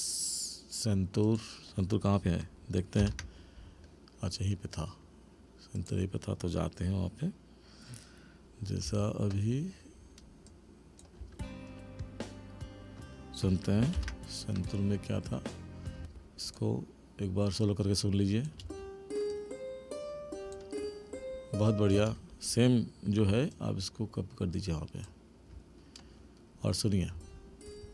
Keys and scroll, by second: 3.0 ctrl+=, 11.2 space, 14.0 ctrl+=, 16.0 space, 18.6 space, 21.9 space, 27.1 space.